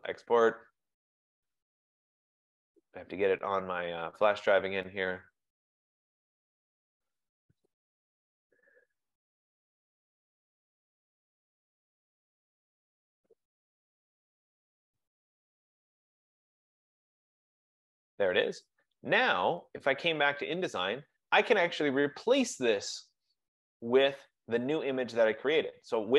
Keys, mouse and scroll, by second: 0.1 click, 4.1 click, 6.7 F15, 6.8 click, 7.1 click, 8.4 click, 8.7 click, 10.2 click, 10.5 click, 12.0 click, 12.2 click, 13.9 click, 14.5 click, 15.1-16.8 typing, 20.3 click.